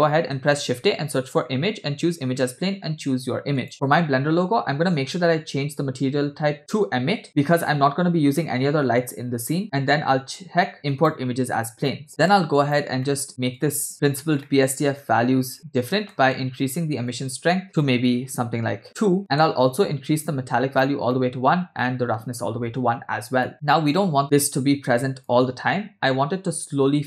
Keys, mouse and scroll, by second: 0.5 shift+a, 12.1 middle click, 12.3 click, 13.0 middle click, 13.5-13.9 drag, 14.5 middle click, 15.3-15.9 scroll up 2, 16.1 middle click, 17.1-18.8 drag, 19.2 middle click, 20.2 click, 21.1 middle click, 21.8 click, 23.2 scroll down 2, 23.5 click, 25.4-27.0 drag.